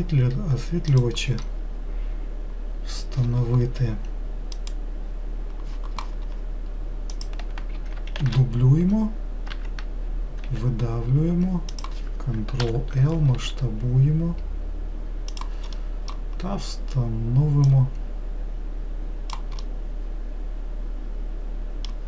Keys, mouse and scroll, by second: 7.4 click, 8.5 shift+d, 10.7 e, 12.9 ctrl+l, 13.6 s, 16.1-17.9 middle drag, 17.9 click, 19.9-22.0 middle drag.